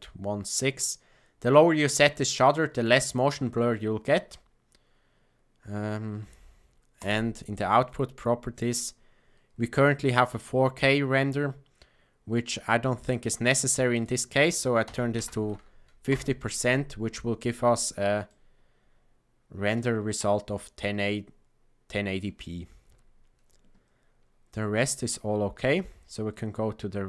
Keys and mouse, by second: 6.9 click, 13.9-16.9 drag, 18.2-19.7 shift+middle drag.